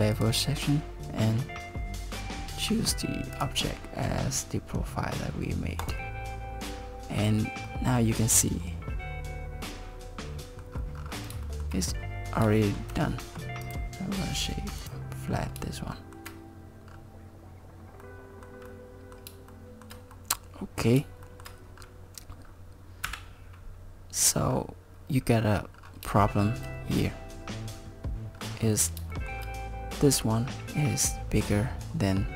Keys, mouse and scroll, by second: 0.2 click, 3.4 click, 6.7 scroll up 5, 7.7 middle click, 11.0-11.3 scroll down 5, 11.5 shift+middle click, 11.9 middle click, 12.6 shift+middle click, 13.1 middle click, 13.6 scroll down 5, 13.6 right click, 15.3 scroll up 3, 16.0 shift+middle click, 16.9-17.4 scroll down 3, 17.9 scroll down 1, 18.0 middle click, 18.7 middle click, 19.5 shift+middle click, 20.1 middle click, 21.3 shift+middle click, 21.8-22.6 scroll down 3, 23.1 KP_7, 24.3-24.8 scroll up 3, 25.7-26.0 scroll down 3, 26.3 shift+middle click, 28.4 scroll up 4, 29.1 shift+middle click.